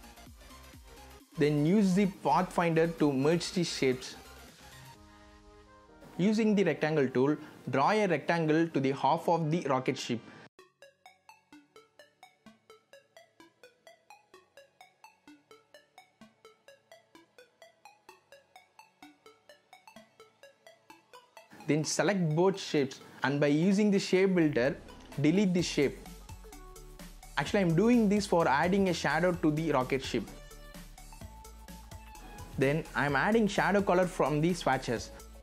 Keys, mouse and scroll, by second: 4.2 BackSpace, 4.4-12.0 drag, 12.6 v, 13.1 click, 15.5 z, 15.9-17.2 drag, 17.6 click, 19.5 scroll down 1, 20.1-21.9 drag, 26.2 click, 27.5 alt+click, 28.8 alt+v, 29.1 click.